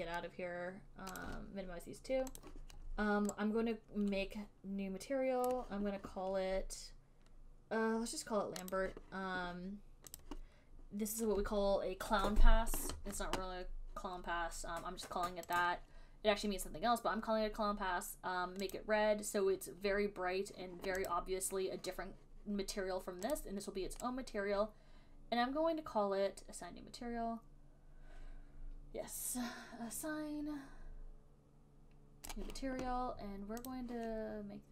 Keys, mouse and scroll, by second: 1.6 right click, 2.7 click, 5.8 right click, 9.1 right click, 10.5 click, 10.5 right click, 15.9 click, 17.4-21.8 drag, 23.8 click, 32.6 right click, 34.0 click.